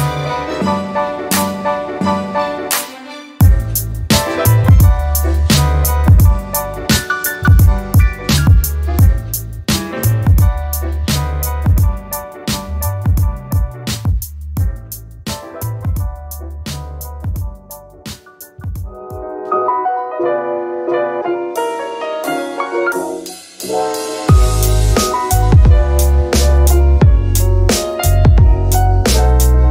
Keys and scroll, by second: 15.3 4, 16.1 Return, 25.3 e.